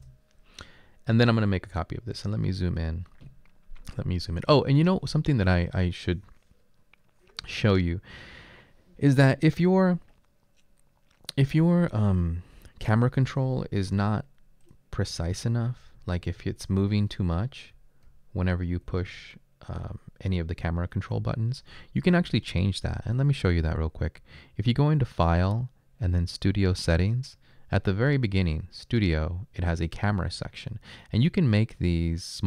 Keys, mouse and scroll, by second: 0.0 Return, 13.9 typing, 15.1-16.7 typing, 17.9-19.8 typing.